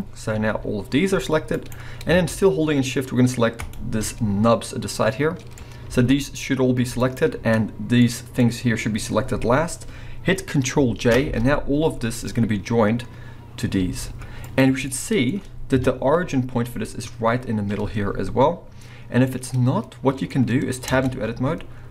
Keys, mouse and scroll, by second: 0.3 g, 1.7 right click, 3.6 shift+click, 4.2-4.9 scroll up 2, 4.9-5.3 middle drag, 5.6 scroll down 1, 5.9 g, 7.1 right click, 7.3 scroll up 1, 8.0 middle click, 11.2 ctrl+j, 12.3 scroll down 1, 13.8 g, 14.6 right click, 15.2 middle click, 15.8 KP_1, 16.3 scroll up 1, 19.0 scroll down 1, 19.3-21.0 middle drag, 21.0 Tab, 21.3 scroll up 2.